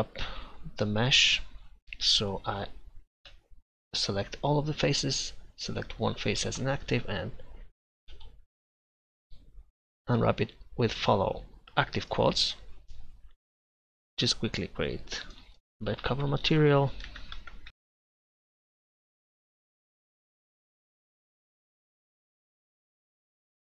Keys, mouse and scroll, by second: 3.5 a, 3.9 a, 5.6-8.2 right drag, 8.2 u, 13.6 Tab, 13.8-15.2 drag, 19.4-20.8 drag, 22.2 click, 23.1 click.